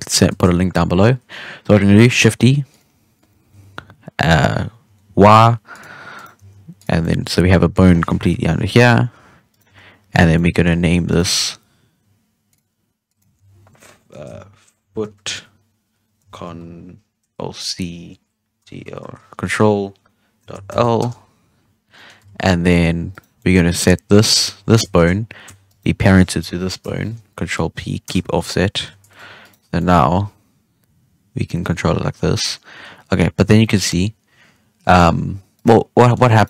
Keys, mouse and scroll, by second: 0.2 shift+d, 3.1-3.5 drag, 3.5 g, 6.1 right click, 6.3 g, 6.9 scroll down 1, 7.0-7.5 middle drag, 7.5-8.3 scroll down 1, 8.3 KP_7, 8.9-9.4 scroll up 3, 9.4 right click, 9.6 g, 10.3-10.6 middle drag, 10.6-11.0 scroll down 2, 11.0 right click, 12.4-15.1 drag, 15.1 o, 21.8 scroll down 1, 21.9-22.2 middle drag, 22.2 ctrl+Tab, 22.5 scroll up 1, 22.6-23.1 middle drag, 23.1 right click, 23.3-24.2 middle drag, 24.2 Tab, 24.5-24.9 scroll up 2, 24.9-25.6 shift+middle drag, 25.6 shift+right click, 26.8 ctrl+p, 29.0 ctrl+Tab, 29.4 right click, 29.5 scroll down 1, 29.7 middle drag, 30.0 g, 35.9 scroll up 1, 35.9-36.3 middle drag, 36.3 right click.